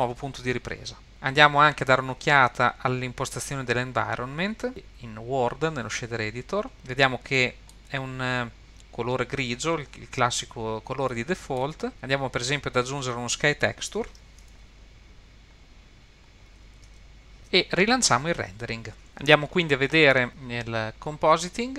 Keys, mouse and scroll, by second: 2.2-4.7 drag, 6.2-6.7 scroll down 2, 6.7 middle click, 6.7 scroll up 3, 7.4 middle click, 11.1 middle click, 12.1-14.1 drag, 14.6-15.5 drag, 16.3-16.9 drag.